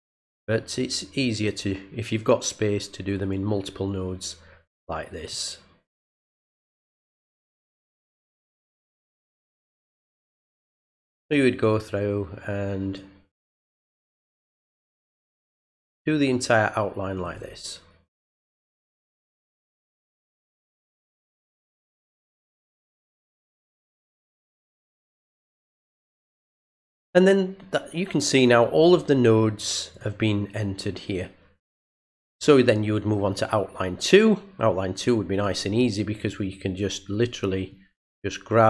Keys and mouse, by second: 0.3-1.4 drag, 2.1-3.3 drag, 5.3 click, 8.1 click, 9.2 click, 10.1 click, 12.4 click, 14.5 click, 14.7 click, 17.0 click, 17.2 click, 18.8 click, 19.0 click, 20.2-21.6 drag, 22.1 click, 22.7 click, 24.2 click, 25.3 click, 26.4 click, 29.9 click, 35.3 click, 35.8 click, 37.7-38.6 drag.